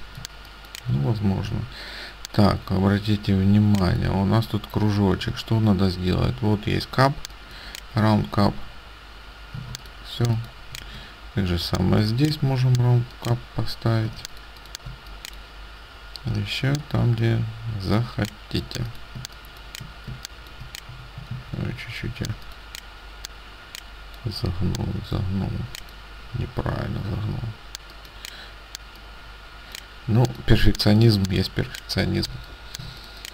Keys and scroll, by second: 10.0 ctrl+alt+space, 14.1 ctrl+space, 19.3 space, 20.2 ctrl+space, 21.0 a, 21.3 ctrl+z, 30.7 ctrl+space.